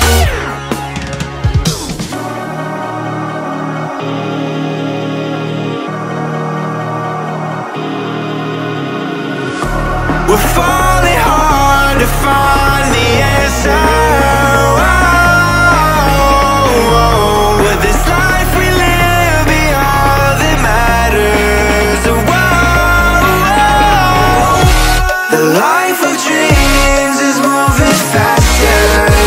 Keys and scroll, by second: 21.3-22.7 typing, 27.6-29.2 typing.